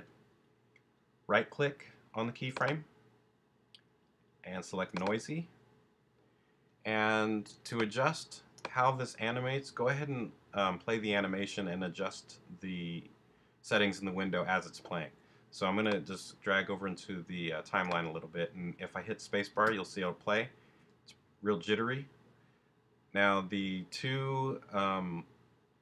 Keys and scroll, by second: 19.5 space.